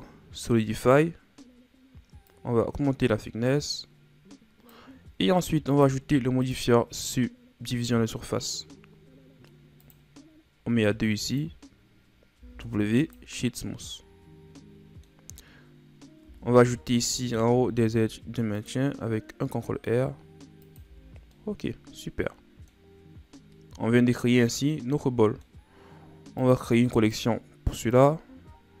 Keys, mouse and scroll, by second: 2.3-5.3 drag, 5.8-9.5 drag, 9.9-12.4 drag, 12.4 w, 13.6-16.2 middle drag, 16.2 Tab, 17.6 ctrl+r, 20.9 Tab, 21.1 scroll down 3, 21.4-23.3 middle drag, 23.3-24.7 scroll down 3, 24.7-26.4 middle drag, 26.4 click, 27.0 right click, 28.1-28.8 right drag.